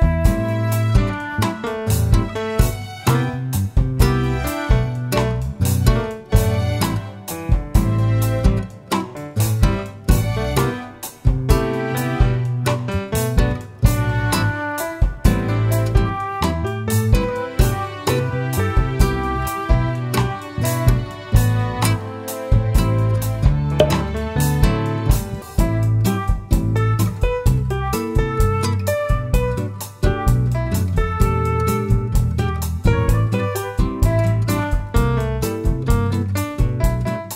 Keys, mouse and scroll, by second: 0.1 click, 0.4 scroll up 1, 1.0-1.4 scroll down 1, 1.4 click, 1.8 `, 2.9-3.9 scroll down 2, 3.9 shift+z, 5.6-7.2 middle drag, 7.1 click, 7.2-8.4 scroll up 2, 8.4 g, 10.2 click, 10.3-11.1 scroll down 2, 11.1-14.0 middle drag, 12.3-13.0 scroll up 2, 13.0 shift+z, 14.0-16.1 drag, 16.7 ctrl+a, 18.1-19.0 scroll down 2, 19.0-19.7 middle drag, 19.7 click, 20.4 click, 21.0-21.7 middle drag, 21.7 scroll up 1, 21.9 scroll down 1, 22.4 shift+a, 23.9 middle click, 23.9 s, 24.1 middle click, 24.5 click, 24.7 middle click, 25.2 click, 25.6 Tab, 25.6 2, 25.9 click, 26.1 shift+middle click, 26.1 scroll down 2, 26.4 e, 26.9 click, 27.1 click, 27.4 ctrl+b, 28.4 click, 28.5 scroll down 1, 28.6 Tab, 28.8 middle click, 28.9-29.4 scroll up 3, 29.0 right click, 29.2 shift+middle click, 30.1 shift+middle click, 30.2 scroll up 2, 30.3 click, 30.4-30.8 scroll down 2, 31.9-34.5 drag, 33.0 o, 33.3 Return.